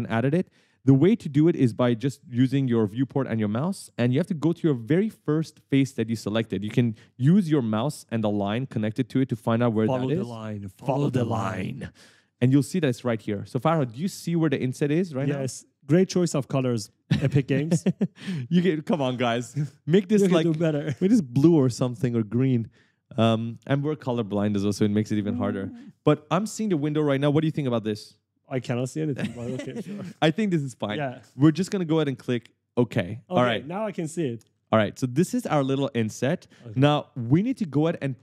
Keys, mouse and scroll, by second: 0.9 right click, 1.1 a, 2.7 right click, 2.8 w, 3.8 right click, 3.9 d, 4.6 right click, 6.8 right click, 10.2 right click, 12.0 right click, 12.1 a, 13.2 right click, 13.3 w, 14.1 s, 32.8 click, 33.3-36.2 typing, 33.5 right click, 34.6 right click.